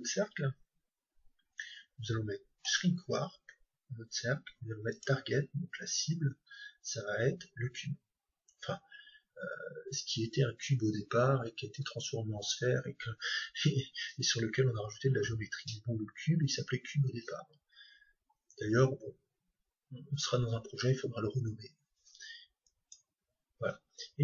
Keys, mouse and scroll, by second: 4.9-6.9 drag.